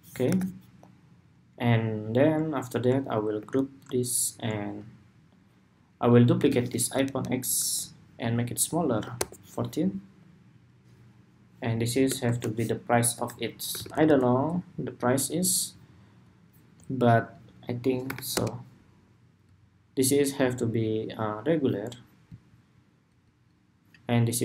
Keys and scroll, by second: 0.0 super+=, 3.1 super+g, 6.2 super+d.